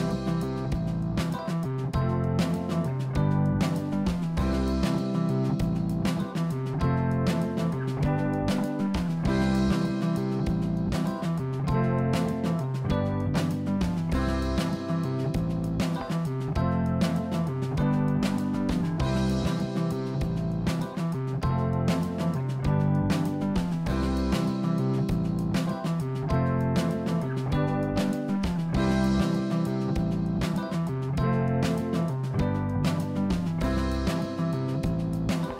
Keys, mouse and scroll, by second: 0.7 e, 4.2 r, 11.9 e, 22.2 g, 24.0 click, 24.6-25.2 scroll down 2, 25.2-26.9 middle drag, 30.2-31.8 middle drag, 35.0 middle click.